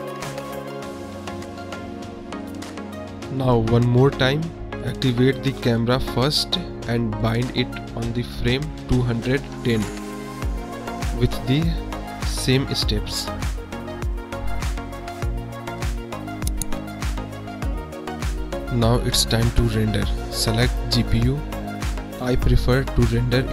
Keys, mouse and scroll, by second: 0.0 space, 0.6 click, 0.8 space, 2.2 space, 2.5 click, 3.0 space, 3.5 space, 4.6-5.6 drag, 6.9 click, 7.8 m, 8.1 click, 9.4 click, 9.5 space, 9.9 space, 10.3 click, 11.0 click, 11.2 space, 12.9 space, 13.3 click, 14.1 n, 15.2 click, 15.4 space, 15.6 space, 16.0 click, 16.6 click, 16.7 space, 18.0 space, 23.4 click.